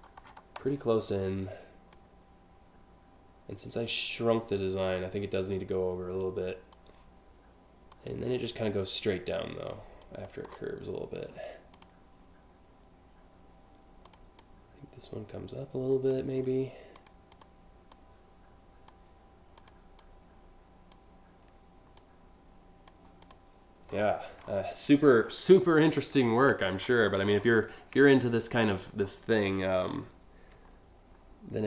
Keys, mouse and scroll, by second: 1.6-6.4 drag, 7.5-9.6 drag, 10.1 scroll down 1, 11.4 click, 13.7 click, 14.0-15.7 drag, 16.6 click, 17.0 click, 17.6 click, 19.2 click, 19.6 click, 21.6 click, 22.8 click, 23.5-24.2 scroll down 2, 24.5 alt+scroll down 1, 25.0-25.7 scroll up 3, 26.1-26.9 scroll up 3, 27.0 ctrl+scroll down 1, 27.7 scroll up 1, 28.1 scroll down 1, 28.6 scroll down 1, 29.5 scroll down 1, 30.4-30.9 alt+scroll up 2.